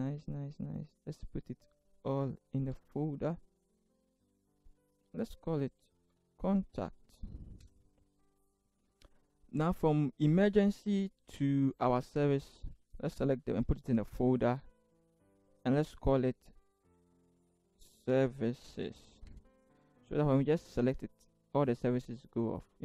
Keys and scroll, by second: 2.6 ctrl+shift+g, 5.8-7.6 typing, 13.6 ctrl+shift+g, 16.9-19.0 typing, 19.3 Return.